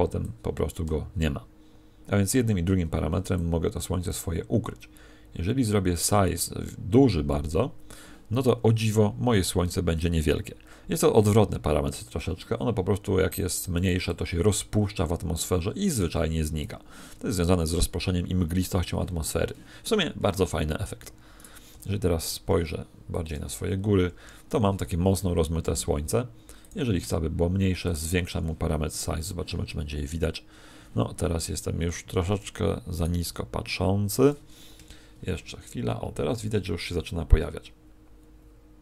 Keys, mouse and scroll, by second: 20.4 Escape, 21.3 right click, 21.7 r, 23.2 click, 31.9 Escape, 32.9 right click, 33.2 r, 34.2 click.